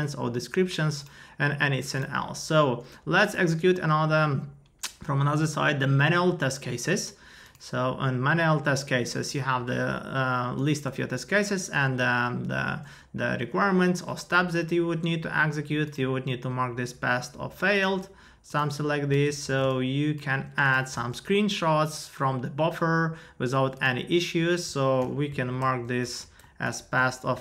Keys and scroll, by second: 20.1 ctrl+a, 21.1 super+v, 25.0 super+u, 25.3 super+i, 25.6 super+Return, 26.0 super+u, 26.4 super+Return, 26.8 super+u, 27.2 super+i.